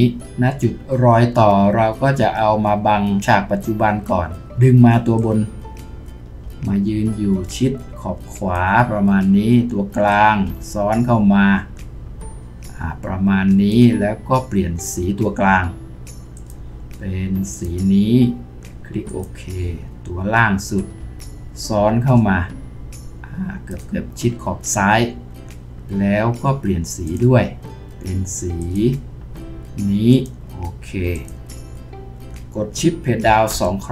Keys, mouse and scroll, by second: 15.3 click.